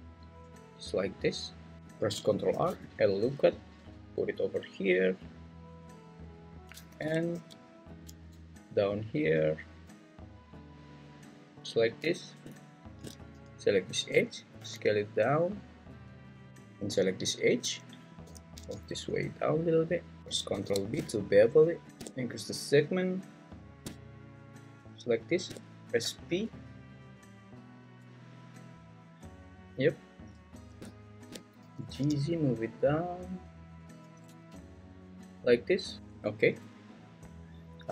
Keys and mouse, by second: 1.3 click, 2.5 ctrl+r, 6.0 click, 7.3 ctrl+r, 11.6 click, 14.6 s, 16.5 ctrl+z, 18.2 g, 18.6 z, 20.5 ctrl+b, 26.0 p, 29.4 click, 31.6 g, 31.9 z, 33.9 click, 34.3 Tab, 36.0 Tab.